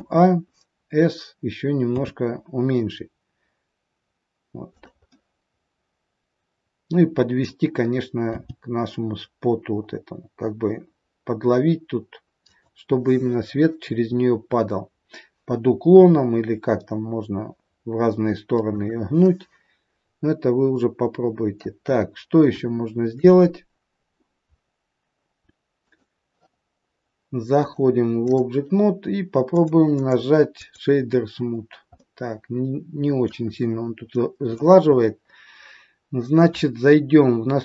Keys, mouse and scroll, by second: 1.8 s, 5.1 middle click, 8.4 g, 12.8 scroll up 4, 14.6-15.9 scroll down 1, 15.9 scroll down 1, 15.9 r, 19.3 middle click, 22.0 scroll up 4, 22.7 shift+middle click, 23.5 scroll down 3, 24.4-24.8 scroll up 2, 25.8 right click, 27.5 click, 29.4 click, 29.8 right click, 31.5 scroll down 3, 31.9 middle click, 34.1 middle click, 34.8 scroll up 4, 35.9-37.1 scroll down 1.